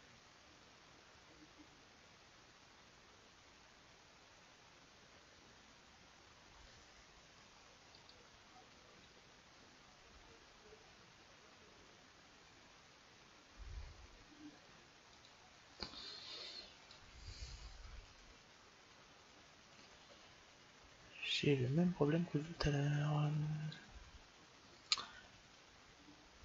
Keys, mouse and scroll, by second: 7.7-9.7 drag, 16.7-18.5 drag, 18.6 click, 18.9 click, 19.7 click.